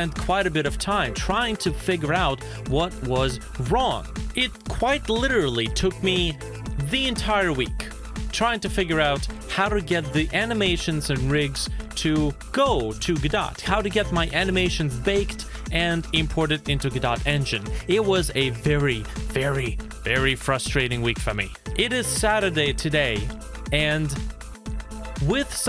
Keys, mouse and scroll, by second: 0.6 z, 1.2 z, 1.9 z, 2.5 middle click, 2.6 shift+middle click, 3.1 middle click, 3.3 scroll down 1, 4.0 scroll up 1, 4.1 space, 4.6 space, 8.1 scroll up 1, 10.1-10.6 scroll down 1, 11.3-12.3 scroll up 1, 20.9 space, 21.7 space, 23.8 i.